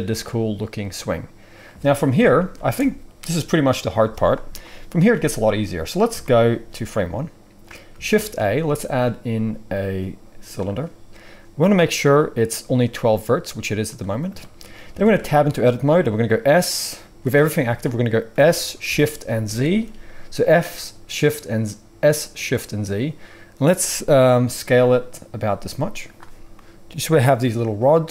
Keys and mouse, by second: 2.1 KP_1, 2.5 space, 8.1 shift+a, 14.9 Tab, 16.3 s, 18.3 s, 26.1-28.1 middle drag.